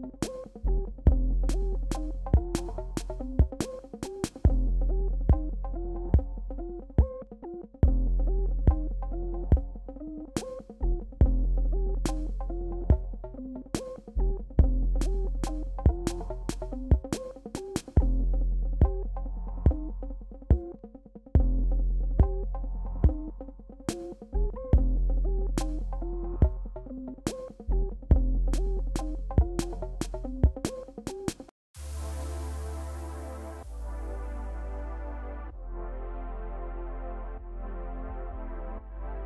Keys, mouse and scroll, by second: 1.0 typing, 1.6-5.4 drag, 5.4 alt+scroll down 1, 6.4 alt+scroll down 1, 7.9 click, 12.2 right click, 16.4-19.0 drag, 21.0 click, 22.1 alt+scroll up 1, 22.7 space, 23.0 click, 23.2 space, 24.2-25.2 typing, 26.1 F5, 29.3 click, 29.9 right click, 31.3-33.7 drag, 33.7-34.3 scroll up 1, 34.6 scroll down 1, 35.4 click, 35.8-36.4 scroll down 1, 37.5 click.